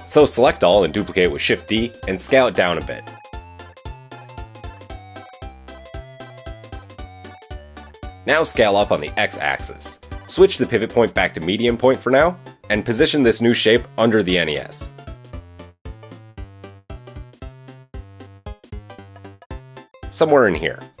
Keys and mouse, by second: 0.3 a, 1.7 shift+d, 3.6 s, 7.5-10.8 middle drag, 7.5 KP_1, 8.3 s, 10.8-16.2 drag, 14.0 g, 16.2-21.0 middle drag, 17.5 KP_3, 18.7 g.